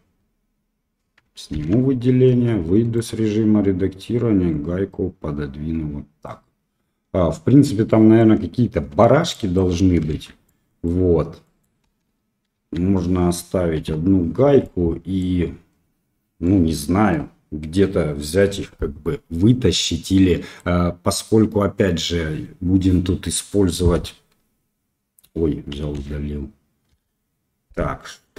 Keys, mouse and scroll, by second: 1.5 alt+a, 2.2 Tab, 2.9 click, 4.0-6.2 drag, 7.8 middle drag, 8.9 Tab, 9.3 middle click, 9.6 Tab, 10.1 shift+z, 10.4-10.8 middle drag, 11.4 middle click, 11.8 KP_1, 14.6-15.2 middle drag, 16.4-17.1 middle drag, 20.0-20.5 middle drag, 23.9 Delete, 25.9 ctrl+z, 26.9 KP_7.